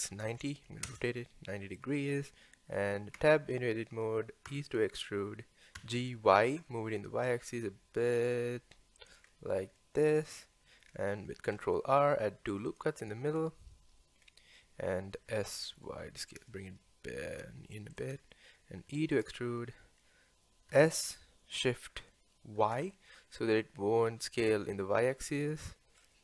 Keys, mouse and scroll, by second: 1.8-2.7 scroll up 2, 2.7-3.2 scroll down 1, 3.2 Tab, 4.5 e, 5.8 g, 9.3-9.8 scroll up 1, 9.8 shift+middle click, 10.5 scroll down 1, 10.7 scroll up 1, 11.6 ctrl+r, 13.4-14.2 scroll down 1, 14.2-15.3 scroll up 1, 15.3 s, 18.2-18.9 scroll down 1, 18.9 e, 20.7 s.